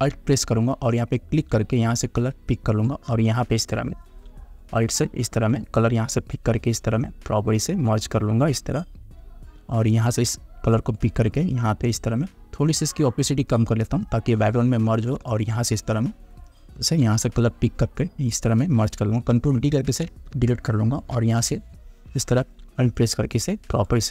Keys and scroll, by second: 20.0 ctrl+d, 20.6 space.